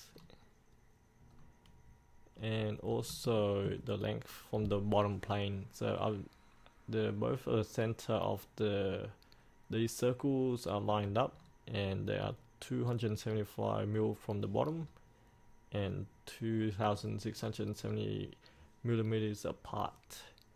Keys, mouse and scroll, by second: 1.3 scroll up 1, 2.4-2.9 scroll down 1, 2.9 scroll up 1, 3.3 shift+middle click, 11.4 scroll down 1, 14.8 scroll up 1, 17.0 scroll down 1, 18.0-18.9 scroll up 1.